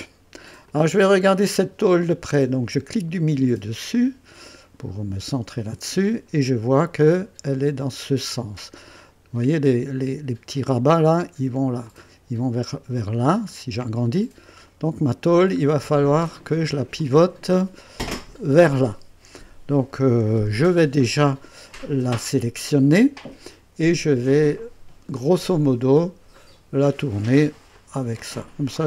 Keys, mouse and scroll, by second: 0.7-1.4 drag, 1.6-2.2 right drag, 3.1 middle click, 3.9-6.2 drag, 6.3-6.7 scroll up 2, 7.0-9.5 drag, 9.7-11.1 drag, 11.9-12.8 drag, 13.5 scroll up 2, 14.1-15.6 drag, 15.6-16.7 scroll down 5, 17.0-18.0 drag, 20.1-20.9 typing, 23.2 click, 25.0 right click, 26.4 click, 27.7-28.8 drag.